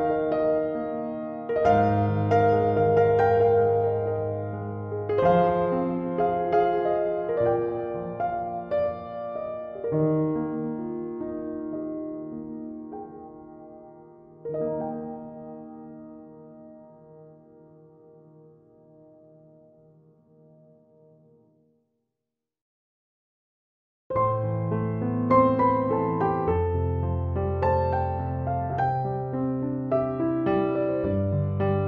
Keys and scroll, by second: 18.8 space.